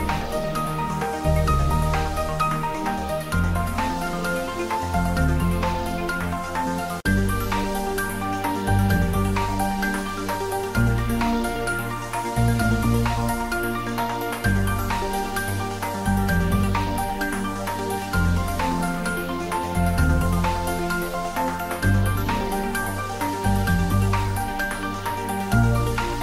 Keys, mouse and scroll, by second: 0.8 click, 4.0 click, 4.3 s, 7.0 click, 8.3 shift+click, 8.7-11.3 typing, 11.7 Right, 12.3 Return, 12.6 ctrl+s, 12.8 click, 13.6-14.4 middle click, 14.8 click, 17.0 click, 18.3 click, 19.6 click, 21.0-22.2 scroll up 1, 22.2 click, 23.8 click, 24.0 s, 25.1 click.